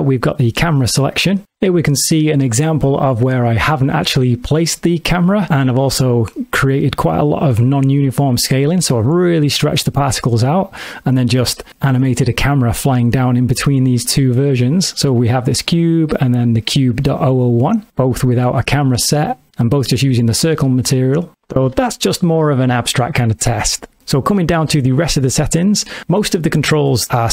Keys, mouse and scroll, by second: 6.4 middle click, 11.4 middle click, 11.7 shift+middle click, 14.9 click, 15.7 click, 16.8 click, 25.2 middle click.